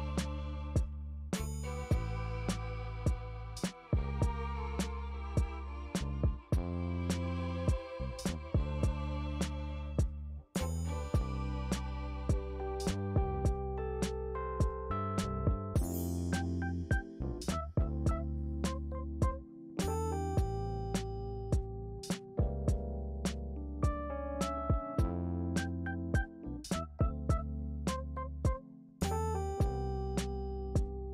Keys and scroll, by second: 6.2-7.4 typing.